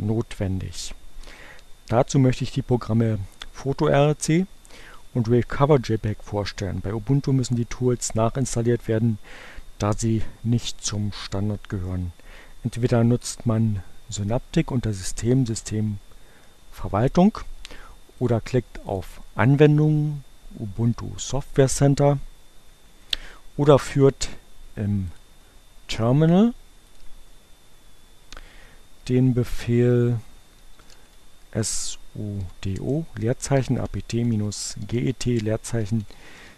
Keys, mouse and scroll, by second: 14.6 click, 18.2 click, 23.0 click, 23.7-25.6 drag, 26.8 click, 28.7 s, 30.6-32.2 typing, 33.3-36.5 typing.